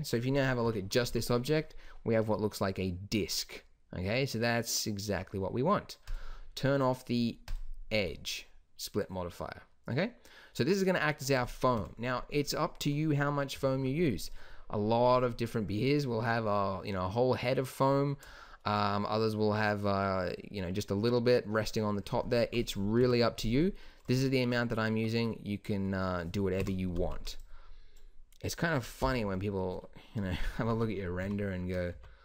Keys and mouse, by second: 0.6 KP_Divide, 1.0 z, 6.0-8.1 drag, 8.1-9.3 middle drag, 11.7 KP_1, 13.5 KP_Divide, 22.9 KP_1, 24.9 Tab, 26.5 KP_1, 26.8 a, 27.1 b, 29.0 h, 30.6 Tab, 31.1 KP_Multiply, 31.8 KP_Divide.